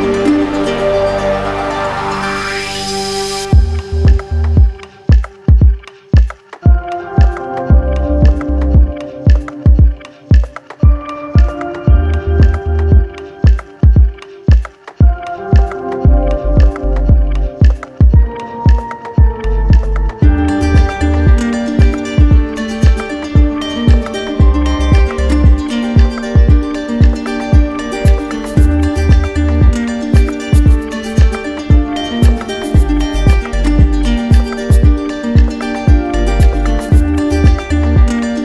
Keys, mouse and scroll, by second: 33.4-34.5 drag, 35.7 click, 36.7 click.